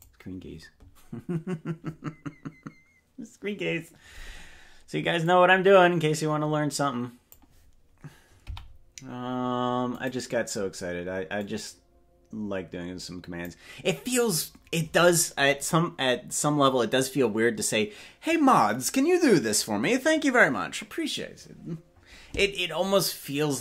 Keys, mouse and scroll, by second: 5.3-7.4 drag, 8.4 i, 11.4-13.5 drag.